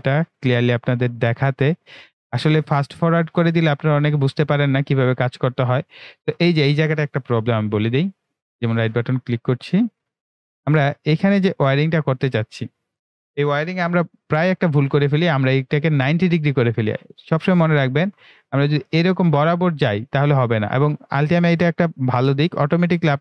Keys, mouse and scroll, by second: 2.1 click, 5.8 right click, 8.3 right click, 9.0 click, 10.1 Delete, 10.7 click, 11.4 Delete, 14.4 ctrl+w, 17.9 click.